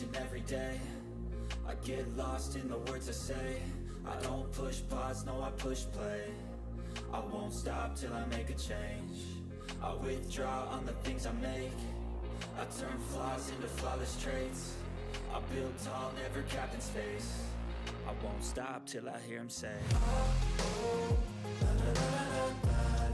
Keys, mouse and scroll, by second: 0.6 click, 1.6 /, 1.9 ctrl+s, 3.9-4.2 scroll up 1, 5.3 click, 5.9 /, 6.5 b, 7.7 click, 8.1 ctrl+s, 9.0-9.3 scroll down 1, 10.4 scroll down 1, 11.9 click, 12.3-13.6 typing, 16.3-18.2 typing, 19.6-20.5 typing, 23.0-23.1 scroll up 1.